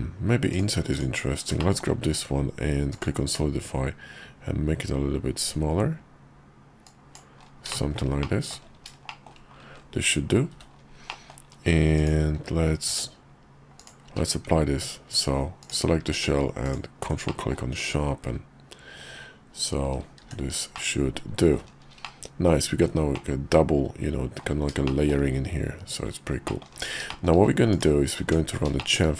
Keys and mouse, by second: 0.9 click, 1.6 shift+middle click, 2.1 q, 7.7 shift+middle click, 8.2 middle click, 9.1 shift+middle click, 10.5 h, 11.1 middle click, 12.0 click, 12.9 q, 13.8 click, 14.0 q, 15.6 click, 16.1 q, 17.3 middle click, 17.8 KP_5, 20.2 shift+2, 20.7 middle click, 22.0 middle click, 23.1-24.4 middle drag, 24.8 shift+middle click, 26.5 middle click, 27.1 shift+middle click, 27.7 click, 28.2 Tab, 28.8 shift+click.